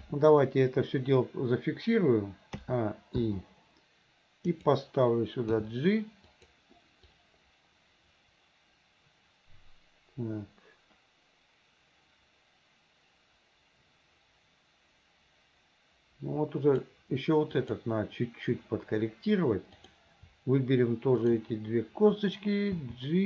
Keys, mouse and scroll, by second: 0.0 KP_3, 2.6 a, 3.3 i, 4.5 click, 5.6 g, 7.2-16.9 drag, 17.6 click, 19.7 click, 21.2 shift+click, 22.8 g.